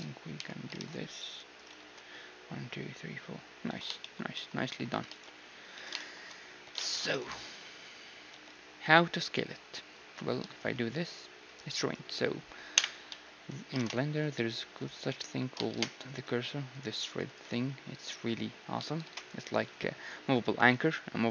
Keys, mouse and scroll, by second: 0.4 j, 0.8 ctrl+Tab, 1.8 ctrl+x, 3.7 a, 4.0-9.9 middle drag, 5.1 ctrl+s, 5.8 z, 6.6 z, 7.1 z, 7.4-8.5 drag, 7.4-9.3 right drag, 8.3 z, 10.4 s, 12.8 KP_1, 13.1 z, 13.8 ctrl+Tab, 14.8-17.0 right drag, 15.1 z, 15.7 shift+s, 17.0-19.3 drag, 19.0 shift+s.